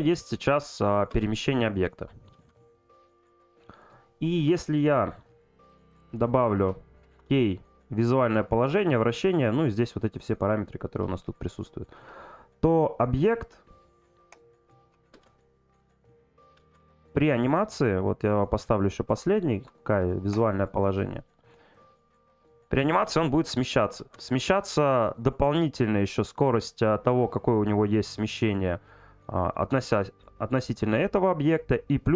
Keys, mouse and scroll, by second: 3.2 click, 4.7 click, 6.0 click, 17.3-19.4 drag, 21.7 click.